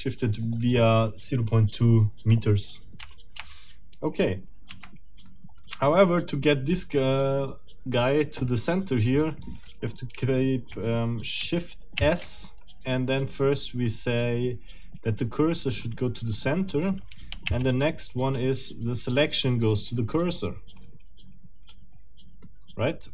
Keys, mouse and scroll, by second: 3.0 BackSpace, 4.7 Escape, 5.3 middle click, 12.0 shift+s, 15.7 click, 17.5 shift+s, 20.8-21.9 drag, 22.4-23.1 middle drag.